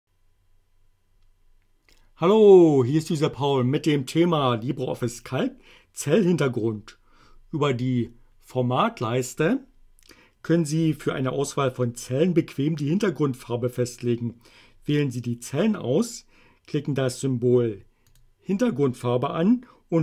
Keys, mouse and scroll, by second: 18.2 click.